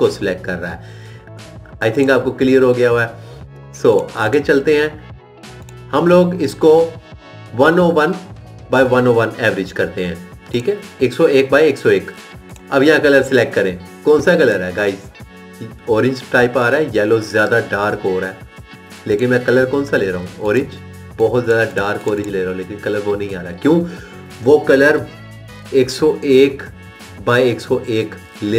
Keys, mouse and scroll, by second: 13.5 click.